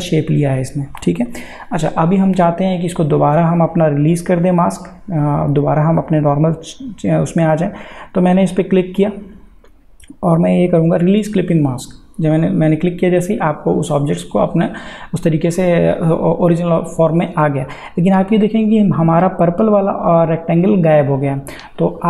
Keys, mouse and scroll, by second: 2.5 click, 9.0 click, 11.8 click.